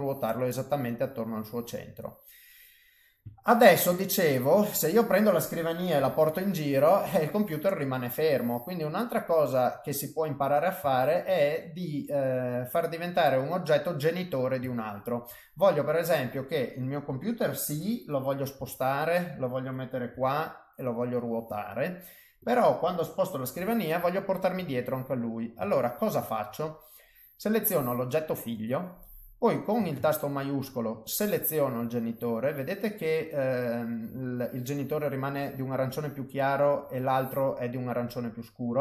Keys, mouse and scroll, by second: 1.0 middle click, 3.3 shift+middle click, 4.0 middle click, 4.7 click, 5.9 g, 9.2 middle click, 10.9 ctrl+middle click, 11.3 middle click, 13.5 middle click, 14.6 ctrl+middle click, 15.3 middle click, 16.5 click, 17.7 KP_7, 18.5 g, 20.1 r, 21.1 middle click, 22.4 click, 23.5 g, 25.1 middle click, 25.7 ctrl+middle click, 26.3 middle click, 27.6 click, 31.0 shift+click.